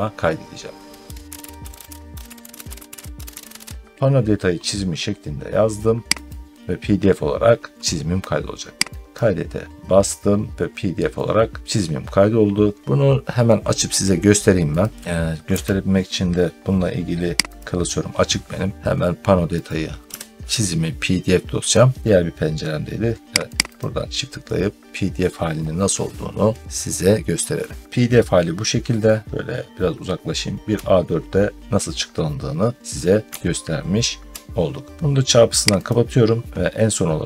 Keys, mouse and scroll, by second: 1.0-4.9 typing, 2.2 Caps_Lock, 2.7 click, 6.2 click, 9.0 click, 12.8 click, 14.7 click, 17.5 click, 18.7 middle click, 19.5 click, 20.0 p, 22.0 click, 23.4 click, 23.6 click, 27.8 click, 27.8-29.0 scroll, 29.3 ctrl+scroll, 33.2 ctrl+scroll up 1, 35.7 click, 36.0 ctrl+scroll up 1, 36.2 ctrl+scroll, 36.5 ctrl+scroll up 1, 37.1 ctrl+scroll.